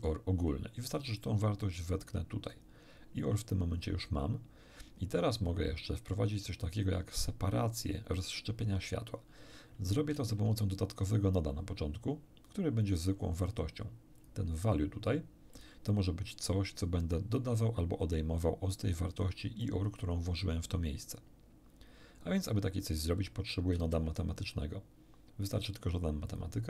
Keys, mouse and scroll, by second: 1.2-2.7 drag, 10.1 shift+a, 14.2 click, 15.5 click, 19.6 click, 23.7 shift+a, 26.3 click.